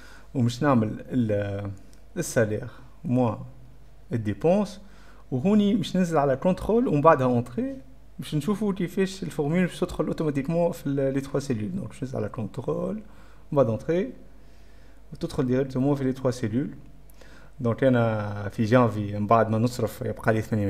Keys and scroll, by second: 2.9 F12, 3.0 Print, 3.1 Insert, 3.1-5.2 typing, 6.6-7.7 typing, 11.2-12.0 typing, 12.7 ctrl+y, 12.7 ctrl+o, 12.8 ctrl+', 13.0 ctrl+Return, 13.6 ctrl+Return.